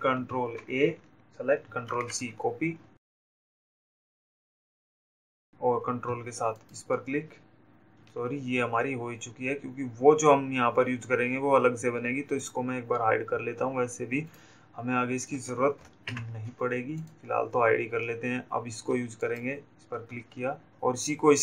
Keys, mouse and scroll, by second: 1.0 ctrl+a, 4.3 click, 6.4 ctrl+click, 12.4 click, 13.7 d, 14.7 click, 17.3 ctrl+click, 20.5 click.